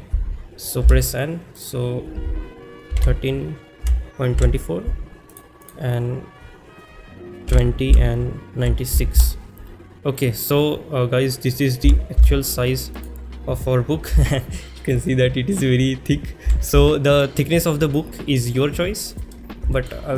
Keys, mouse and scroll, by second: 1.6-5.4 drag, 1.6 n, 5.6-9.2 drag, 13.0 click, 13.0 g, 13.0 x, 19.1 click, 19.1 z, 19.7 shift+middle click.